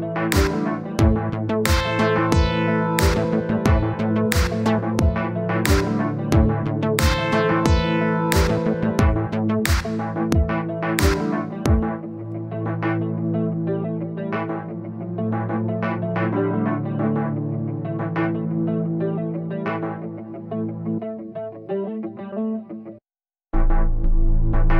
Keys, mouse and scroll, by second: 3.8 Left, 4.3 Left, 4.4 Left, 4.8 Left, 5.1 Left, 6.6-7.8 scroll down 1, 8.1 click, 13.3-15.6 middle drag, 16.2-17.4 middle drag, 17.7 middle click, 18.4 click, 18.8-20.0 middle drag, 21.0 click, 21.2 middle click, 22.0-23.3 drag, 23.3 middle click, 23.8-24.7 drag.